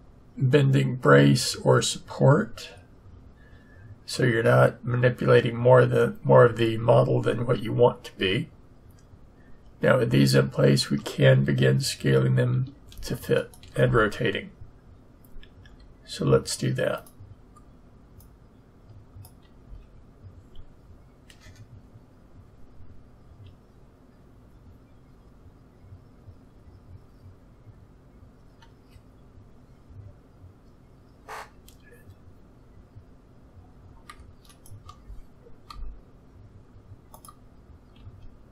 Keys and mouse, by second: 1.7-16.9 middle drag, 15.6 s, 18.2-20.0 drag, 19.6 a, 20.0-23.1 middle drag, 35.7-37.1 drag, 35.7 r, 37.9 s.